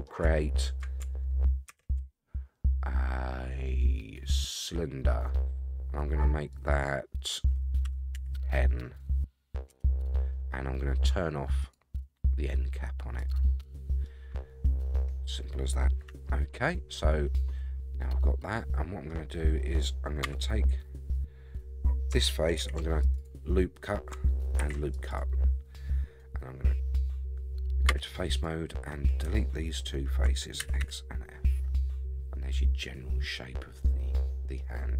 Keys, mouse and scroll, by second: 0.3-0.8 shift+middle drag, 1.7 shift+a, 6.5-9.9 drag, 11.6-13.3 drag, 14.0-15.9 middle drag, 16.1 Tab, 16.6-19.1 middle drag, 20.2 3, 22.6 ctrl+r, 24.6 ctrl+r, 27.9 3, 28.3 click, 29.8 shift+click, 30.6 x, 31.2-31.6 scroll down 3, 31.6-34.6 middle drag, 34.7-34.9 scroll up 3.